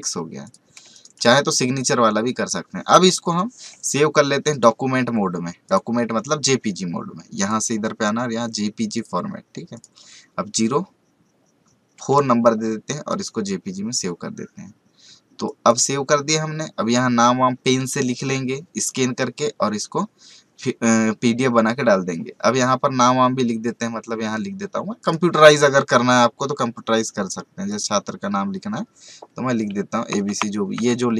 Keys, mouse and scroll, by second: 0.8 space, 0.9 right click, 1.1 click, 4.5 click, 13.9 click, 25.0 click, 27.7 click, 30.7 v.